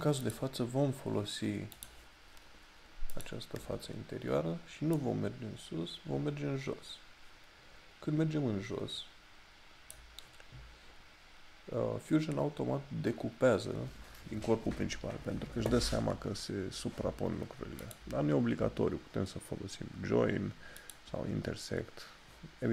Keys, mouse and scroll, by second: 0.3 click, 18.0 click, 20.9 click.